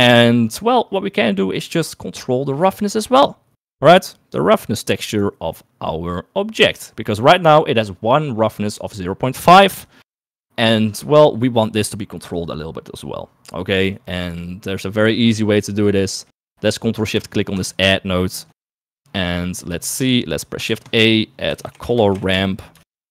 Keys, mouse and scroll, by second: 0.2 shift+middle click, 0.9 click, 1.5 click, 5.3 click, 7.0 click, 8.9 middle click, 14.8 middle click, 16.3 middle click, 19.4 click, 20.2 middle click, 21.1 shift+a, 22.6 r.